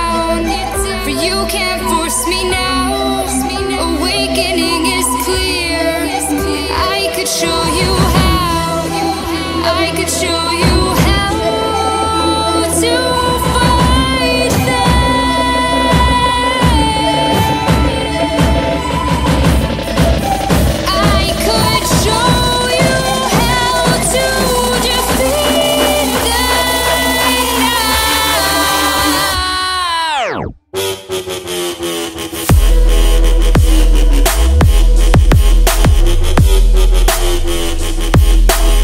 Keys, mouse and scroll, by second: 0.9 click, 1.4-2.7 typing, 3.1 right click, 4.8 click, 5.3-7.7 typing, 8.7-10.2 typing, 11.0 ctrl+click, 13.4 click, 17.1 Up, 17.3 typing, 17.5 Return, 18.6 click, 19.4 1, 19.5 Return, 20.2 click, 22.0 right click, 24.2 click, 25.8-28.1 typing, 26.7 click, 28.4 Up, 28.6 Return, 29.5-37.7 drag.